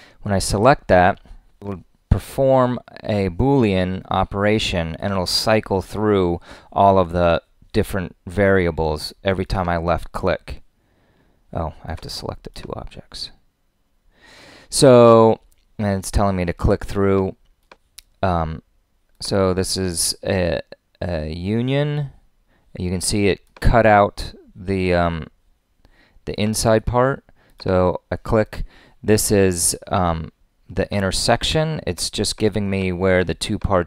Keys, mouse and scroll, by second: 31.3 click.